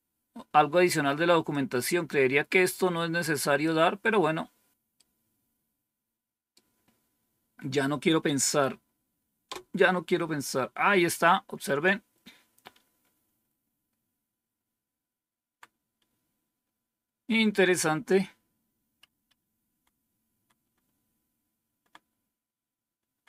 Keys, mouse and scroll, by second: 1.4-3.6 drag, 4.9-6.4 right drag, 7.6 right click, 9.4 Return, 13.6 Down, 14.3-15.4 Down, 16.8 Up, 17.5-18.9 Up, 20.2 Down, 20.7-23.2 Down.